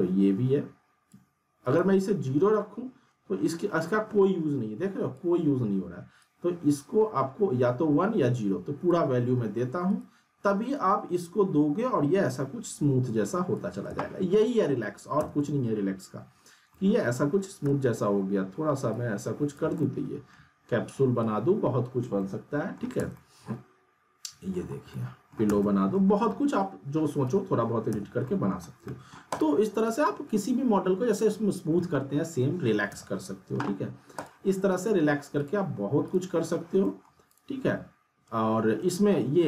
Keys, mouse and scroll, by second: 1.6 right click, 2.5-5.3 drag, 6.5-9.0 drag, 9.9 right click, 11.1-13.5 drag, 13.9 z, 14.4 middle click, 15.2-16.4 z, 15.9-16.4 alt+middle drag, 16.5 scroll down 2, 18.2 r, 18.9-20.4 click, 19.8-21.2 alt+middle drag, 21.2-21.8 click, 22.2-22.8 alt+middle click, 22.9 z, 23.2-24.7 alt+middle drag, 24.7 scroll down 1, 24.9-25.5 alt+middle click, 25.5-26.2 z, 26.0 middle click, 26.0 scroll down 2, 27.2 w, 27.9 z, 28.2 alt+middle click, 28.7 scroll down 1, 28.8 alt+middle click, 29.3 click, 32.9 z, 33.8-34.2 scroll down 1, 34.2 click, 36.8 alt+middle click, 37.3 click, 38.6-39.4 scroll up 1.